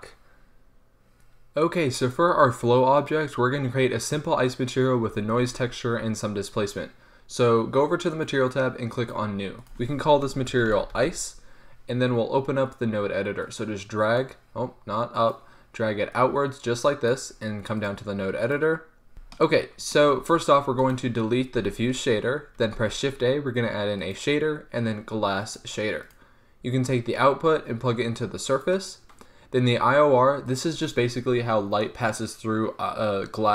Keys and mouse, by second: 8.2-11.5 drag, 13.5 click, 14.0 click, 14.2-15.3 middle drag, 14.3 click, 15.3 click, 15.4 middle click, 15.4-16.5 drag, 16.6 click, 19.1 n, 19.5 n, 21.7 x, 22.7 shift+a.